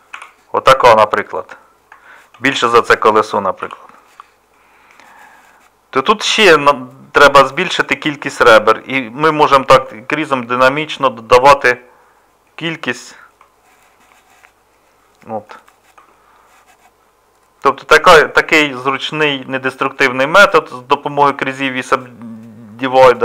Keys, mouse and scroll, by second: 0.1 s, 2.3 s, 3.6 g, 13.8-15.1 middle drag, 16.1-22.6 middle drag.